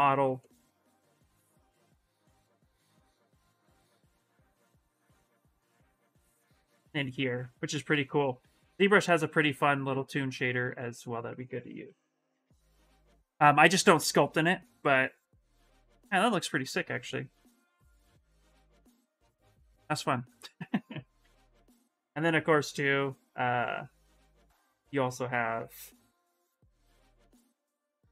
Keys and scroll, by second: 21.6 ,.